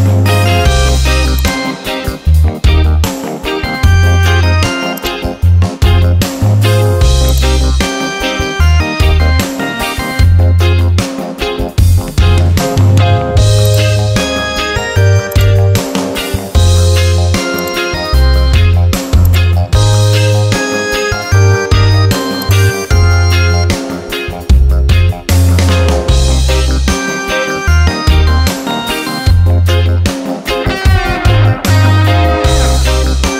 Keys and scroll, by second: 10.5 ctrl+j.